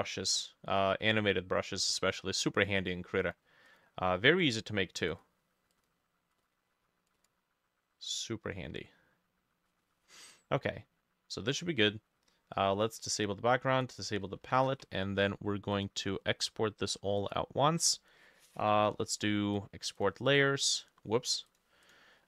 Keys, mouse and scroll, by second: 3.7-5.7 drag, 14.6 ctrl+s, 20.0-22.2 drag.